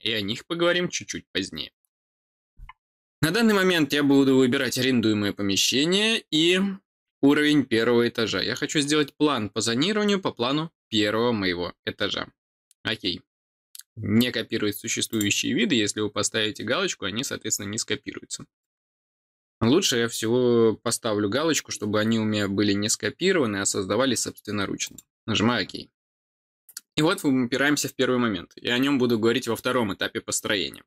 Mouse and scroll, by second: 4.5 click, 15.1 click, 18.6 click, 24.8 click.